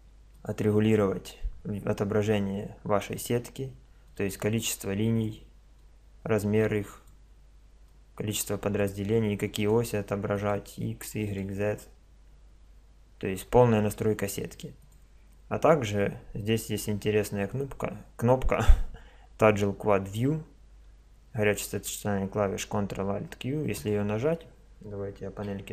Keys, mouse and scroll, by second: 2.1-4.1 middle drag, 4.1-7.5 drag, 7.9-13.0 drag, 14.5-16.5 drag, 16.5 middle click, 23.7 click, 25.3 n.